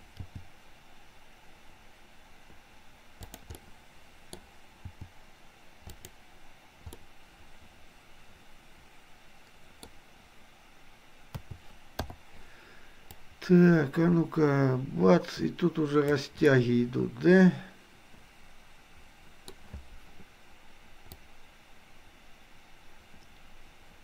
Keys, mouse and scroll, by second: 0.2 g, 3.6 middle click, 5.0 g, 7.1 middle click, 8.3-11.3 middle drag, 11.3 a, 12.1 i, 13.2-16.2 drag, 16.5-19.6 middle drag, 21.2-24.0 drag.